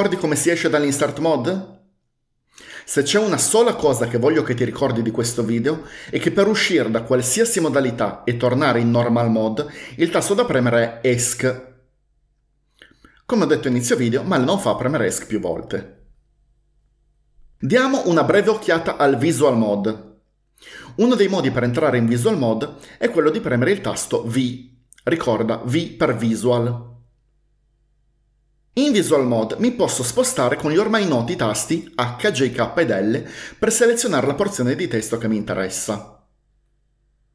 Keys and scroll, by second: 11.5 Escape, 11.6 Escape, 11.7 Escape, 24.4 v, 32.0-37.0 typing.